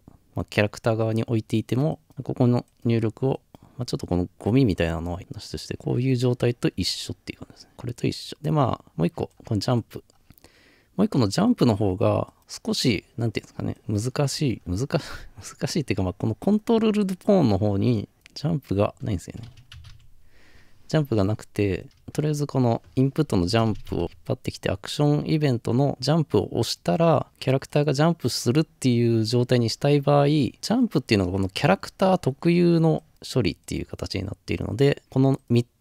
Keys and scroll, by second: 19.7 typing, 23.9 typing.